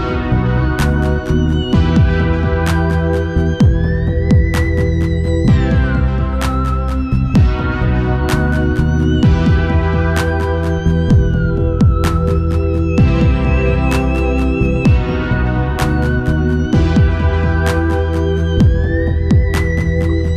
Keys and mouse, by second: 1.4 middle click, 2.3-4.3 right drag, 4.3-5.9 middle drag, 5.9-8.4 right drag, 8.4-10.2 middle drag, 9.3-11.3 right drag, 10.5-13.7 drag, 13.6-15.9 right drag, 16.4 ctrl+s, 18.4-20.3 drag.